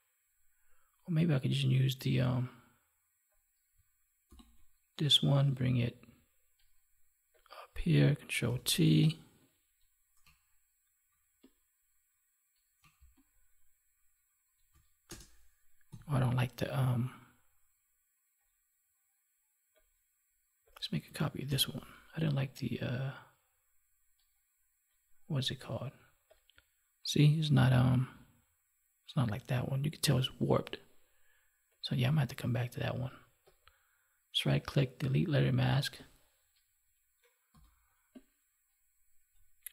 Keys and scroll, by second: 4.2 ctrl+j, 8.4 ctrl+t, 15.8 Delete, 21.4 ctrl+j, 37.5 ctrl+t, 39.6 ctrl+t.